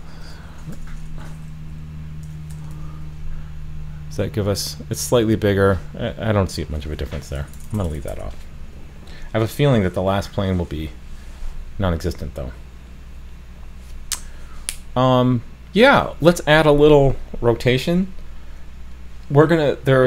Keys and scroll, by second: 2.7 super+s.